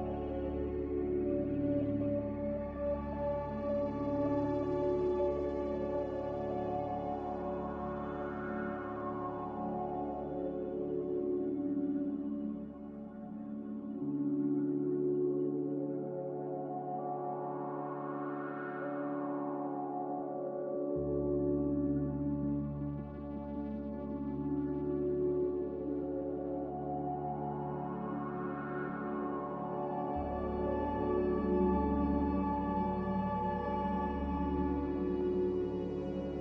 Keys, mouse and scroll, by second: 11.2 ctrl+b, 17.5 Escape, 21.5 ctrl+b, 26.2 ctrl+b.